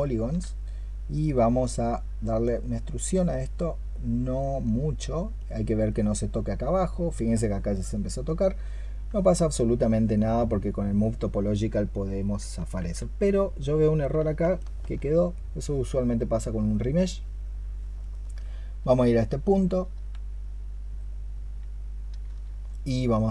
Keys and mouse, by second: 9.0 space, 9.2 alt+click, 12.6 ctrl+z, 14.4 alt+click, 17.8 alt+click, 22.1-23.3 space.